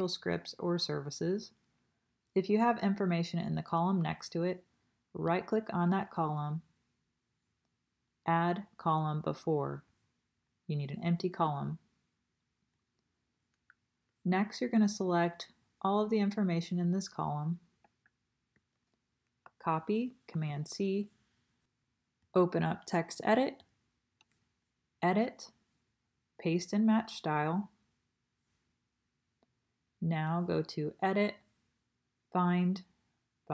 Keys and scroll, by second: 20.3 super+c.